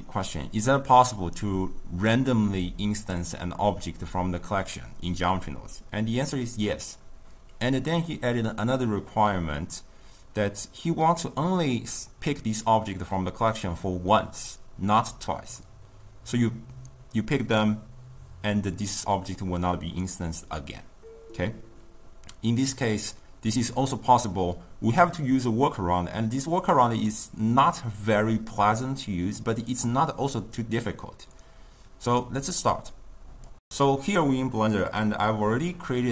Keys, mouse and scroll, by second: 9.6 shift+middle click, 10.4 click, 13.7-15.5 shift+middle drag, 15.5 click, 16.0-17.2 ctrl+middle drag, 17.2 click, 19.6-21.8 shift+middle drag, 21.8 click, 26.5 click, 26.7-28.8 shift+middle drag, 28.8 click, 29.8 shift+middle click, 30.6 click, 31.7-33.4 drag.